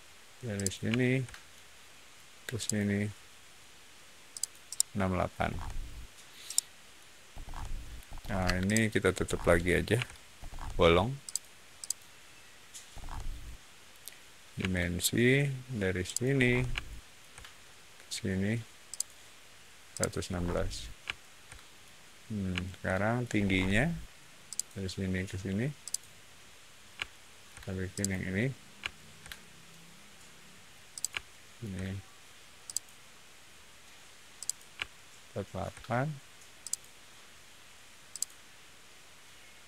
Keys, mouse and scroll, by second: 0.5 click, 0.9 shift+middle click, 2.5 shift+click, 4.2 shift+click, 4.6 shift+middle click, 5.3 scroll down 1, 6.4 shift+middle click, 7.2-8.0 scroll up 1, 8.0 scroll up 1, 8.3 space, 8.5 click, 9.1 scroll up 1, 9.9 l, 10.3-11.2 scroll up 1, 11.2 click, 11.7 click, 12.8 middle click, 14.5 d, 16.0 click, 16.3 middle click, 16.7 shift+middle click, 18.8 shift+click, 19.8 shift+click, 20.2 shift+middle click, 21.0 shift+middle click, 22.5 shift+middle click, 23.3 shift+middle click, 24.4 shift+click, 25.7 shift+click, 27.0 shift+middle click, 27.9 shift+click, 28.8 shift+middle click, 30.8 shift+click, 31.1 shift+middle click, 32.6 shift+click, 34.3 shift+click, 34.8 shift+middle click, 36.5 shift+click, 38.0 shift+click.